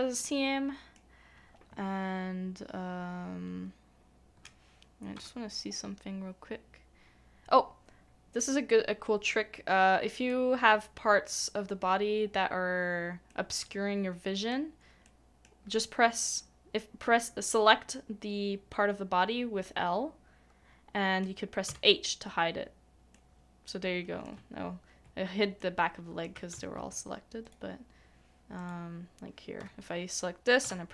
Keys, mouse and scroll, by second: 0.2 middle click, 10.3 i, 10.3 middle click, 13.3 middle click, 23.1 h, 23.1 middle click, 25.6 middle click, 26.5 ctrl+z.